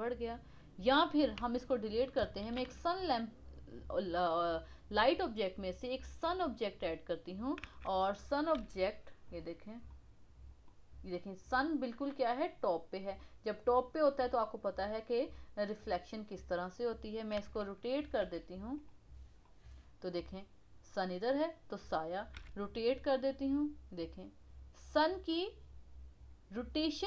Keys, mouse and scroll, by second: 1.3 x, 2.4 shift+a, 7.2 scroll down 2, 7.6 KP_1, 8.5 g, 9.5 scroll down 2, 9.9-11.4 middle drag, 11.4 scroll up 1, 14.8 scroll up 1, 16.1-17.3 scroll down 7, 17.3 KP_1, 18.2 r, 19.4-20.2 middle drag, 20.2-22.3 scroll up 1, 22.3 r.